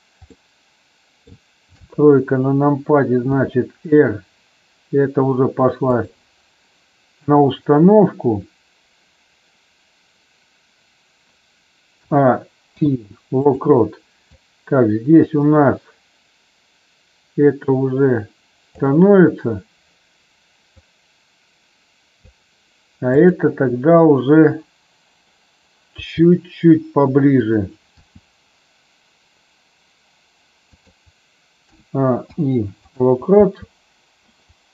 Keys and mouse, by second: 0.4 middle click, 1.8 KP_3, 3.2 r, 12.0 a, 12.6 i, 14.2-18.9 drag, 20.8-22.2 drag, 23.0 click, 25.9 g, 27.4 click, 28.0 g, 31.6 a, 32.1 i, 33.2 space.